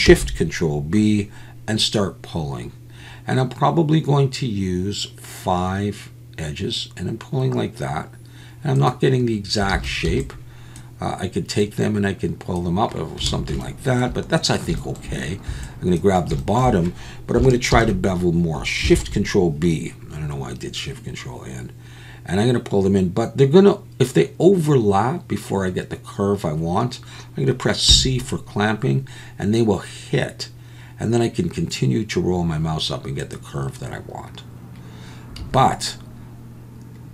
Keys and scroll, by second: 0.0 ctrl+shift+b, 9.7 alt+a, 10.0 b, 13.3 alt+a, 15.5 b, 17.7 ctrl+shift+n, 18.9 ctrl+shift+b, 35.4 a.